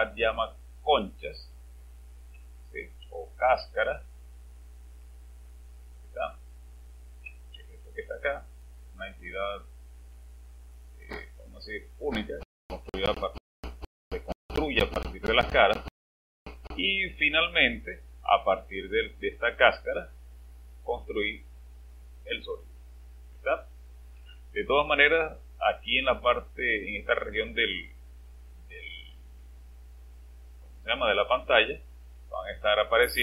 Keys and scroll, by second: 3.0-3.5 typing, 7.8 space, 20.0-20.7 typing.